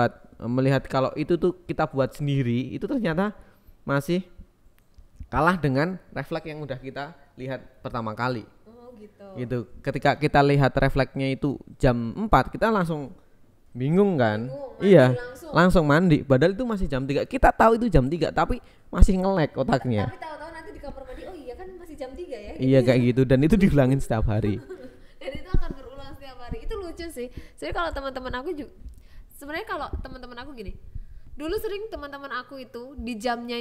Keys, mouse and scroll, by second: 0.8 click, 3.9 KP_0, 10.1 click, 11.0 click, 11.3 click, 13.3-15.1 drag, 15.9 KP_3, 16.5 click, 17.7 r, 18.9 click, 19.9 KP_0, 20.4 click, 21.7 KP_3, 22.0 Tab, 22.6 click, 23.7 r, 24.0 click, 24.6 r, 25.2 click, 25.5 KP_0, 26.0 click, 28.2 ctrl+s, 29.4 shift+a, 30.8 s, 31.9 click, 32.5 g.